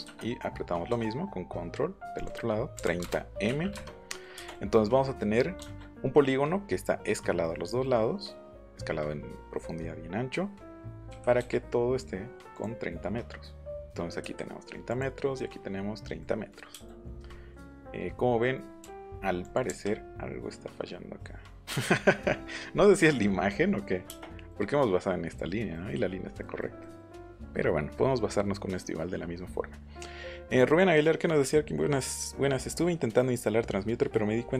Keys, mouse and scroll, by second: 2.1 click, 2.7 KP_3, 3.0 KP_0, 3.4 m, 11.1 k, 11.3 l, 12.5 click, 14.9 click, 16.2 middle click, 16.7 middle click, 18.0 middle click, 18.9 m, 19.4 click, 24.5 middle click, 25.7 middle click, 26.4 middle click, 26.8 middle click.